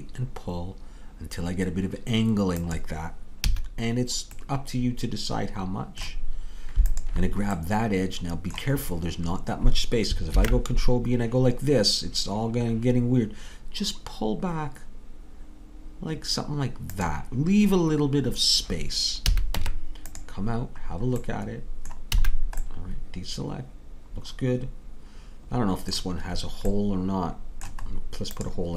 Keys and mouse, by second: 3.5 a, 7.0-8.5 drag, 7.7 middle click, 10.4 ctrl+b, 19.3 a, 19.6 Tab, 22.2 a.